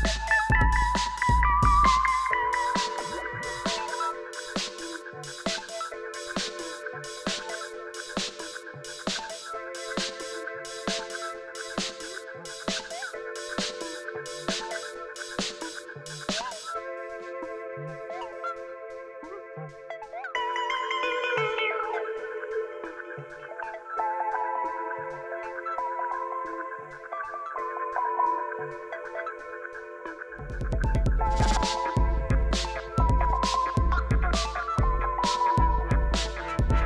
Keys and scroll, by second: 0.2 Return, 2.3 Tab, 3.3 alt+a, 15.7 shift+g, 23.4 Tab, 27.3 shift+a, 27.9 c, 28.4 o, 28.6 l.